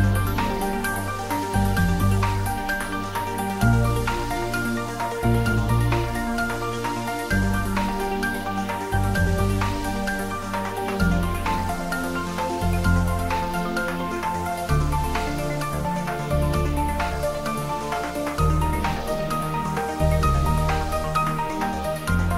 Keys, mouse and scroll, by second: 2.8 click, 2.9 ctrl+s, 3.7 ctrl+s, 5.1 middle click, 6.0 click, 7.7-10.1 drag, 10.1 ctrl+s, 10.9 click, 11.9 ctrl+middle click, 12.4 shift+middle click, 12.6 ctrl+middle click, 15.3 ctrl+middle click, 15.8 shift+middle click, 17.4-20.0 drag, 20.0 middle click, 20.5 click.